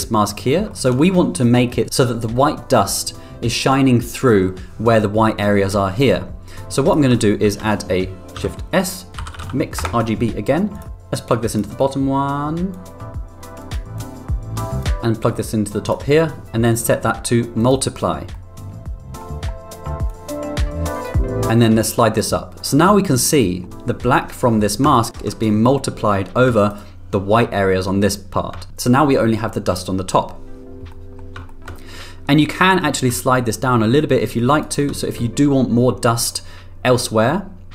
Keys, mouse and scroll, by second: 0.2 middle click, 0.7 middle click, 7.6 shift+a, 11.3 click, 12.7 click, 14.0 click, 14.9 click, 16.8 click, 18.3 middle click, 20.1 click, 21.5 click, 23.0 middle click, 25.0 ctrl+click, 26.7 ctrl+click, 30.9 middle click, 31.5 middle click, 32.6 middle click, 33.3-34.7 drag.